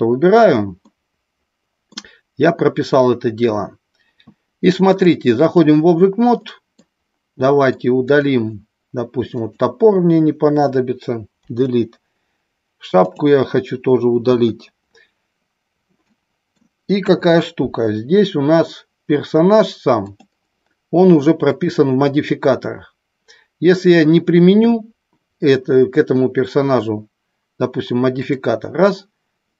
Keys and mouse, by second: 0.8 middle click, 4.8 click, 6.5 middle click, 7.4 middle click, 8.1 click, 9.3 shift+click, 11.4 Delete, 13.1 click, 15.9-16.5 middle drag, 16.9 KP_1, 19.9 click, 28.2 click.